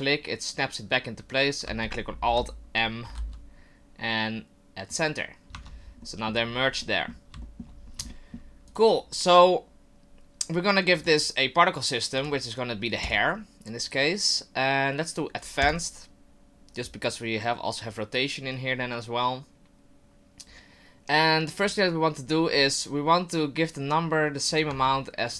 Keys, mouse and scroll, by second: 2.3 alt+n, 3.1 alt+m, 5.5 Tab, 6.0 middle click, 6.3-6.8 scroll down 2, 6.8 middle click, 7.4 shift+middle click, 7.8 scroll up 2, 8.1 shift+middle click, 8.7 right click, 11.0 click, 12.2 click, 13.0 click, 16.5 click, 24.5 right click, 24.7 Tab.